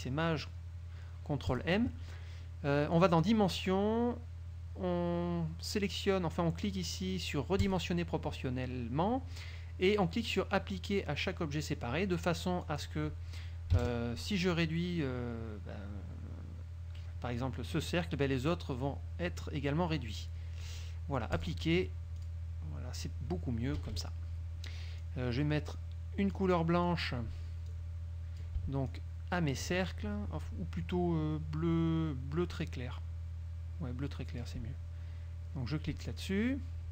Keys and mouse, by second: 1.7 click, 3.1 click, 7.8 click, 12.3 click, 12.8 click, 13.9 KP_5, 20.7 click, 21.5 click, 22.3 click, 23.9 KP_Subtract, 25.1-26.7 drag, 26.9 click, 27.8-28.7 drag, 29.0 shift+click, 32.7-34.8 drag, 36.3 click.